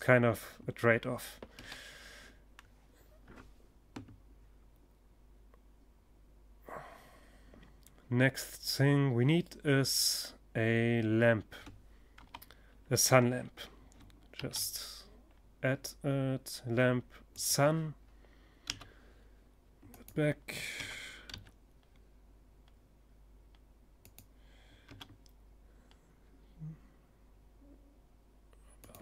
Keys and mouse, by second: 0.0 Escape, 10.6 KP_7, 12.8 shift+a, 17.1 g, 18.5-20.4 drag, 19.2 r, 22.6-24.5 drag, 23.3 r, 27.4-29.0 drag, 28.0 KP_1.